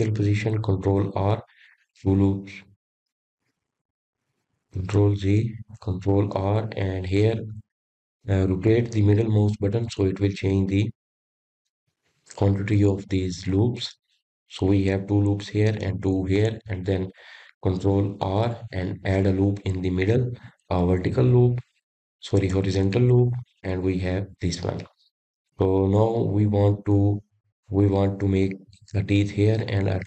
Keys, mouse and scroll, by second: 0.0 ctrl+r, 4.9 ctrl+r, 9.0 ctrl+z, 10.3 ctrl+r, 20.6 click, 22.4 ctrl+r, 27.4 click.